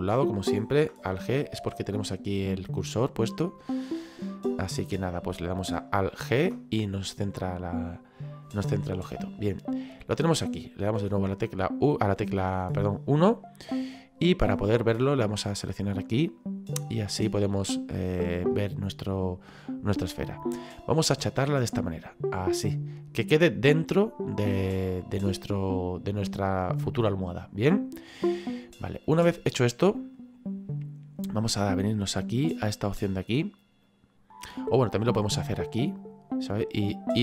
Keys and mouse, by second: 1.6 alt+g, 3.6 click, 4.8 right click, 7.8 middle click, 11.0 KP_1, 15.4 click, 18.0 click, 21.4 click, 32.7 click, 33.8 click, 36.0 click.